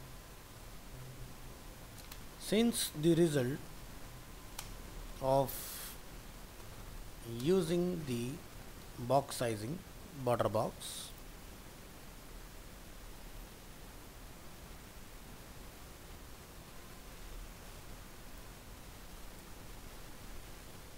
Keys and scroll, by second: 19.7 ctrl+c.